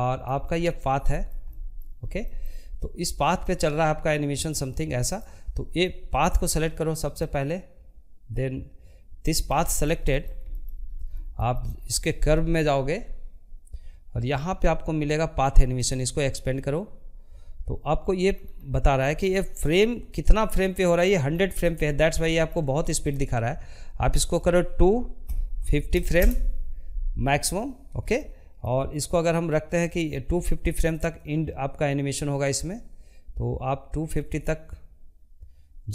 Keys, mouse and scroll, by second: 0.0 scroll up 1, 0.2-2.3 shift+middle drag, 2.3-4.3 drag, 5.2-7.8 middle drag, 7.8 scroll down 1, 8.1 middle click, 8.8 scroll up 2, 9.1-18.9 shift+middle drag, 18.9-19.6 scroll down 11, 19.6 middle click, 20.0 scroll up 1, 20.3 shift+middle click, 20.7 scroll up 1, 21.0-24.2 shift+middle drag, 24.2-26.2 drag, 26.2-27.8 shift+middle drag, 27.8-31.9 drag.